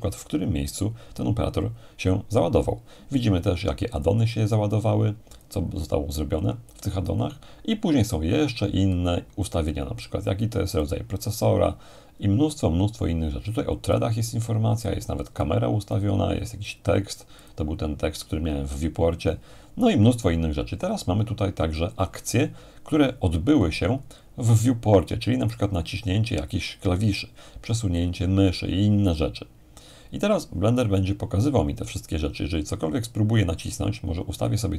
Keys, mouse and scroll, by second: 1.6-3.1 scroll down 2, 4.0-5.9 drag, 5.9-7.3 scroll down 1, 9.7-11.3 drag, 11.3-13.6 scroll down 1, 13.9-18.4 drag, 19.7-21.6 scroll down 1, 23.4-24.9 scroll down 1, 34.5-34.7 drag.